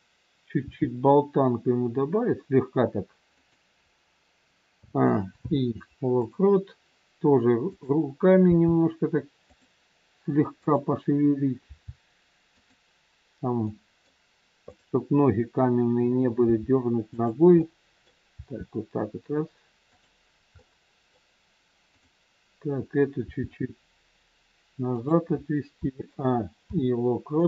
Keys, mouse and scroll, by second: 0.5 r, 4.7 a, 5.2 i, 7.7 click, 8.5 g, 10.5 click, 11.6 g, 13.6 middle click, 14.6 click, 16.5 g, 17.5 middle click, 18.3 g, 20.5 middle click, 21.9 click, 23.1 g, 25.7 a, 26.5 i.